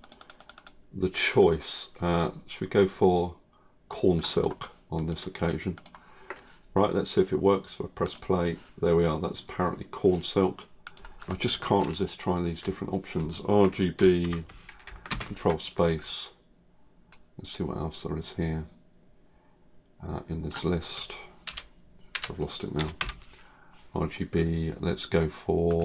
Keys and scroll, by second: 15.0 ctrl+space.